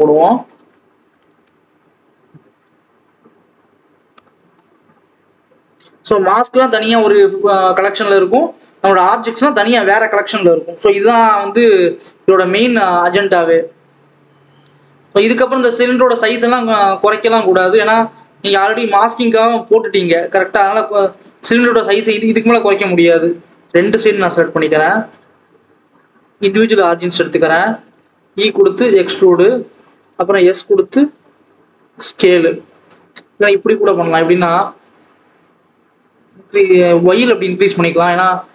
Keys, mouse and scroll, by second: 1.3 KP_0, 4.1 click, 4.7-5.4 scroll up 2, 5.4-5.8 scroll down 2, 8.9-9.6 scroll down 1, 9.6 click, 11.5-12.5 scroll up 2, 12.9-14.7 drag, 14.7 Tab, 21.5 click, 23.3 e, 24.3 shift+click, 26.2 click, 28.2 e, 33.1 ctrl+z, 33.3 ctrl+z, 33.5 ctrl+z, 34.6 a, 34.9 s, 37.1 alt+a, 37.3 click, 38.0 click.